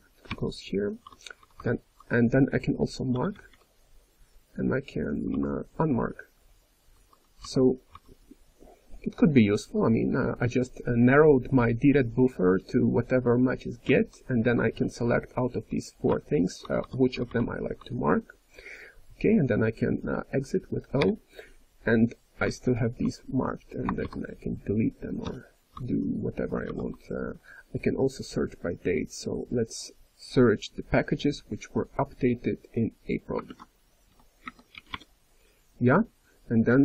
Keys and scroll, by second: 0.0-1.9 typing, 3.1 m, 5.1 k, 5.7 ,, 6.8 k, 7.9 j, 9.5 k, 11.7-12.4 typing, 13.8-15.2 typing, 16.5 j, 17.1 k, 17.7 j, 20.9 o, 24.0 shift+d, 25.7-35.5 j, 26.7 shift+u, 33.4 ctrl+s.